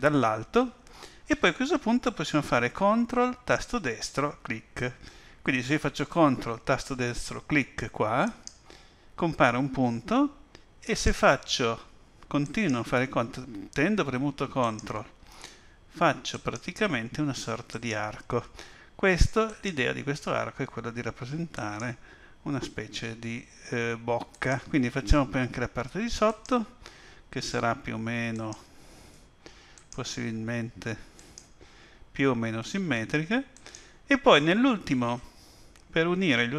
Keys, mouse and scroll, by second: 8.2 ctrl+right click, 10.8 ctrl+right click, 12.4 ctrl+right click, 14.6 ctrl+right click, 16.3 ctrl+right click, 17.7 ctrl+right click, 19.4 ctrl+right click, 21.5 ctrl+right click, 24.3 ctrl+right click, 26.3 ctrl+right click.